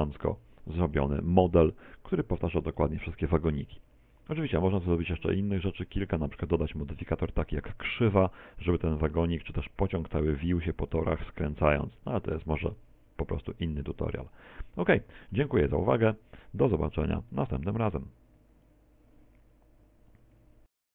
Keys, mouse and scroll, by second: 0.9 middle click, 14.3-15.0 scroll up 2, 15.0 shift+middle click, 15.0-15.7 scroll up 2, 15.7-16.0 scroll up 1, 16.1 shift+middle click.